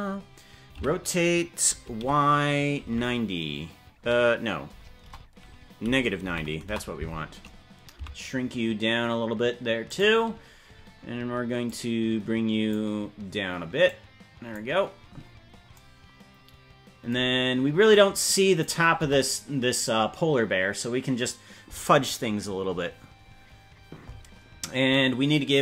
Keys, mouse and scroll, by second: 0.9 r, 7.9 s, 11.6-12.7 drag, 13.8 click, 15.1-15.7 scroll up 6, 17.9 click, 19.1 KP_0.